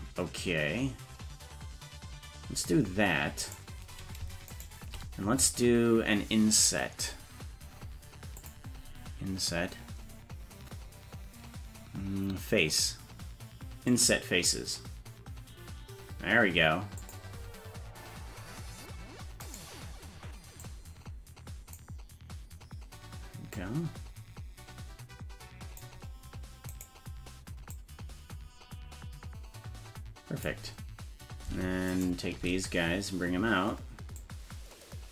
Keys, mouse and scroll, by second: 3.4 right click, 4.5 shift+right click, 8.4-17.1 drag, 19.4 right click, 20.6-21.8 drag, 23.5-25.8 drag, 26.7 right click, 27.7-30.5 drag, 31.9 shift+right click, 34.2-35.1 drag.